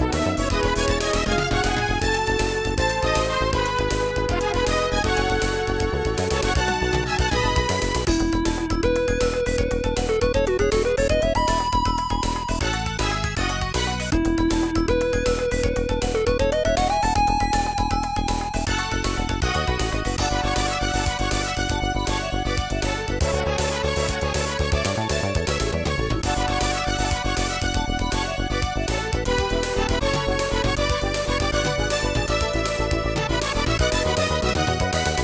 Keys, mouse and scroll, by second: 0.5 middle click, 1.1 scroll up 2, 2.9 click, 3.1 click, 4.0 e, 5.4 y, 7.9 click, 8.8 right click, 10.8 click, 10.8 right click, 10.9 click, 11.8 click, 12.7 click, 12.7 click, 14.3 scroll down 1, 17.4 click, 18.4 e, 19.6 x, 21.0 click, 21.1 click, 21.7 right click, 21.9 e, 22.2 x, 23.4 click, 23.5 click, 23.9 right click, 24.2 e, 25.7 click, 26.3 right click, 26.7 right click, 27.0 e, 29.0 click, 29.1 click, 29.6 right click, 29.8 g.